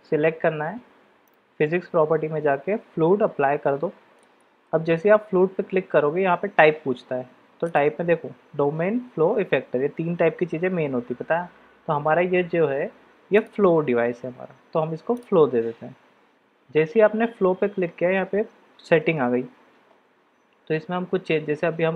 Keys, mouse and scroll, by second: 7.8-11.7 drag, 13.5-15.2 drag.